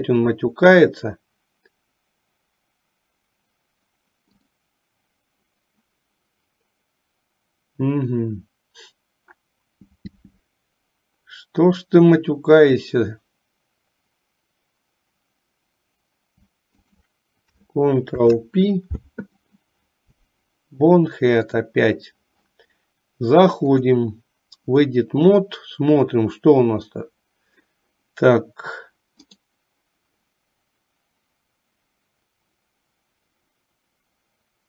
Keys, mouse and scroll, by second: 4.4 click, 16.9 shift+click, 18.2 ctrl+p, 21.7 click, 23.8-25.2 drag, 29.4-34.6 right drag.